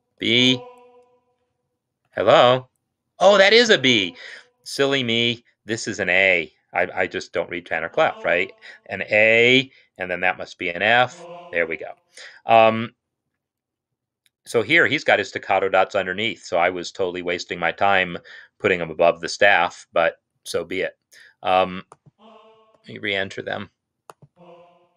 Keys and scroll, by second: 1.9 Escape, 7.6 a, 9.9-10.9 typing, 11.7 Escape, 23.0 shift+s, 24.7 shift+s.